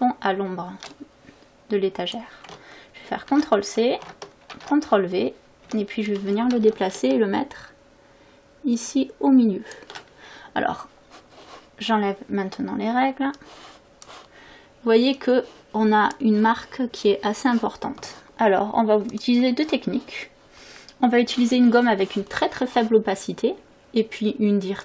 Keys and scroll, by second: 3.3 ctrl+c, 4.5 ctrl+v, 5.7 v, 12.5 v.